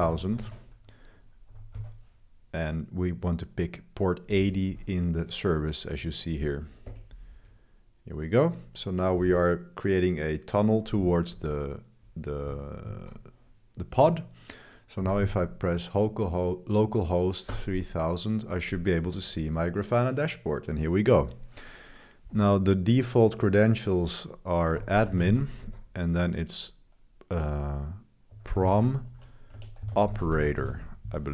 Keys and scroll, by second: 0.0-2.2 typing, 6.9 Return, 11.3 super+1, 11.6 super+1, 12.8 super+t, 14.7-15.7 typing, 17.5 Return, 24.5-25.7 typing.